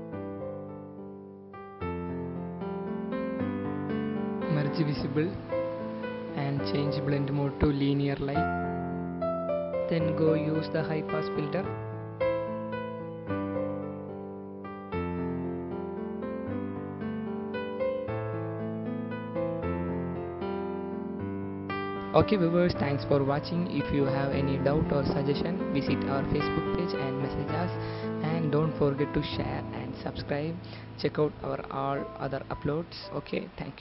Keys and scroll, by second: 4.5 ctrl+alt+shift+e, 5.4 ctrl+alt+shift+e, 21.2 ctrl+alt+0, 21.8 ctrl+0.